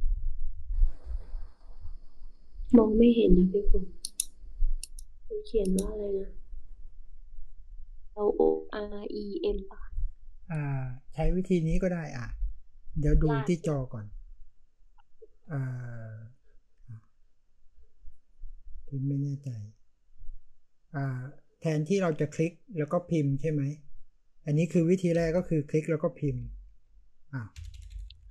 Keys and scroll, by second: 25.1-28.3 typing.